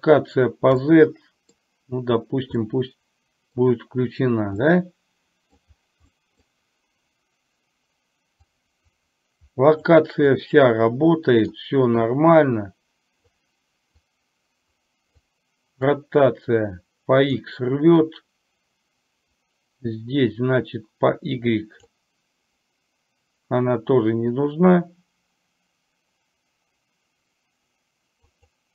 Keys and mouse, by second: 0.9-1.7 middle drag, 2.8-3.5 middle drag, 4.8-5.7 middle drag, 6.2-6.5 middle drag, 8.5-9.9 drag, 10.5-11.7 drag, 12.2-13.4 drag, 14.2-15.3 drag, 16.0-17.4 drag, 18.0-22.0 drag, 28.4 click.